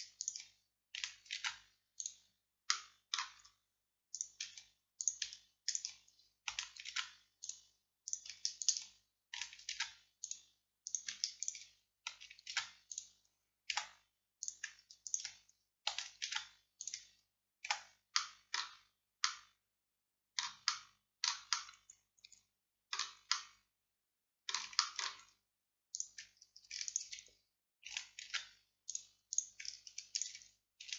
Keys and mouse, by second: 7.0 alt+m, 13.8 z, 16.3 alt+m, 17.7 z, 26.0-28.3 drag, 28.3 alt+m.